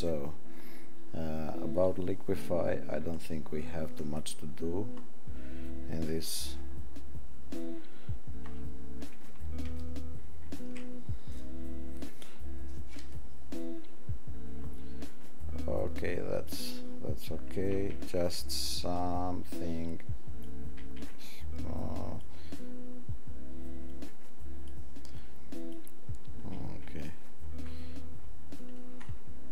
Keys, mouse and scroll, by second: 10.2 ctrl+shift+x, 19.6 click, 21.3 click, 23.9 click, 25.3 click.